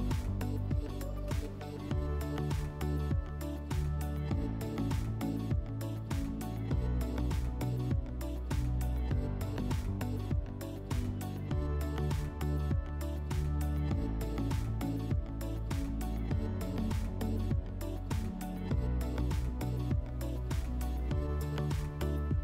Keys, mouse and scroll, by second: 1.0 click, 1.9 click, 2.6 click, 4.6 click, 7.0 click, 10.9 click, 16.5 click, 18.4 click, 19.4 click, 19.5 click, 20.5 click, 21.0-22.4 typing.